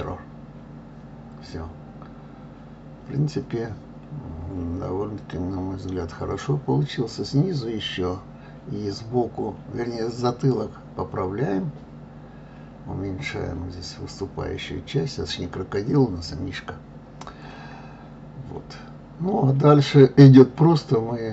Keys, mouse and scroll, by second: 0.2 click, 0.9 click, 2.3 KP_3, 4.5 g, 6.3 click, 7.3 g, 8.7 click, 8.9 middle click, 9.6 click, 11.9 g, 13.0-14.0 middle drag, 14.7-15.7 scroll down 1, 16.0-16.4 scroll up 6, 16.4 scroll down 1, 16.6 shift+middle click, 17.3 scroll down 1, 17.6-18.7 shift+middle drag, 19.0 click, 20.5 click.